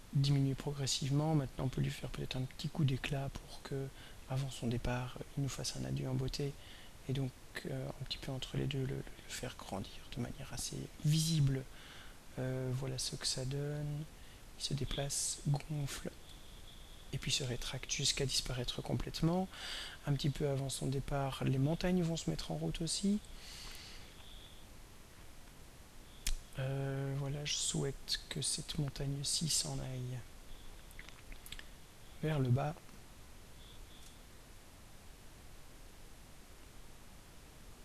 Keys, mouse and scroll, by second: 6.0-8.3 drag, 9.2 click, 10.9 click, 13.3 click, 16.9 click, 18.0 click, 18.4 click, 21.8 click, 25.5 click, 34.7 ctrl+scroll down 2, 35.4 ctrl+scroll down 2.